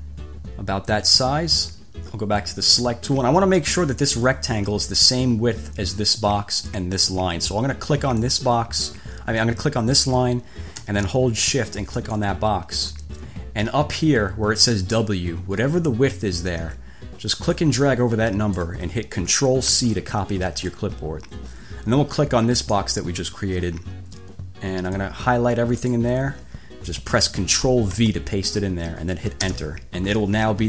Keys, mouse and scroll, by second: 2.8 click, 8.5 click, 12.2 shift+click, 17.8-19.0 drag, 19.9 ctrl+c, 22.8 click, 25.2-26.4 drag, 28.1 ctrl+v, 29.6 Return.